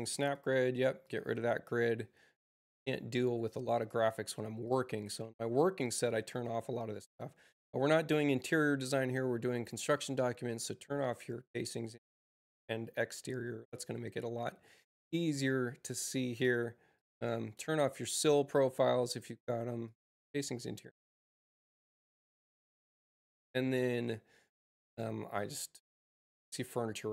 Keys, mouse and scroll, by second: 0.1 click, 0.9 click, 3.4 click, 4.5 click, 6.4 space, 7.0 click, 9.6 click, 10.4 click, 15.7 click, 16.9 click, 19.8 click, 21.0 click, 24.4 click, 25.3 click.